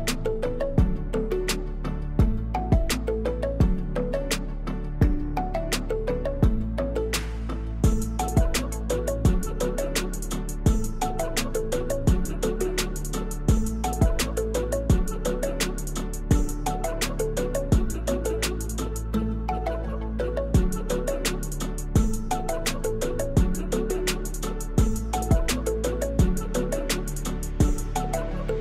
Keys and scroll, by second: 1.0 Tab, 1.4 3, 5.2 Tab, 8.2 Tab, 10.2 ctrl+r, 10.8 Return, 11.6 Return, 12.0 3, 12.6 shift+d, 13.6 p, 14.1 Tab, 15.4 Tab, 18.1 e, 19.4 ctrl+r, 20.0 Return, 20.7 s, 20.9 y, 22.5 Tab, 26.3 Tab, 27.4 3.